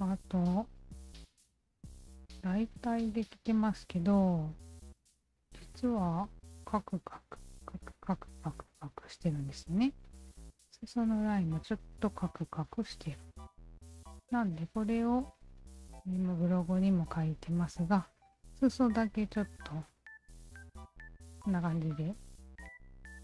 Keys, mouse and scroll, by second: 1.1 alt+click, 2.2-2.8 alt+drag, 3.1 alt+right click, 3.7 right click, 4.1-10.9 alt+drag, 12.2-15.5 alt+drag, 16.8 alt+click, 19.1 alt+click.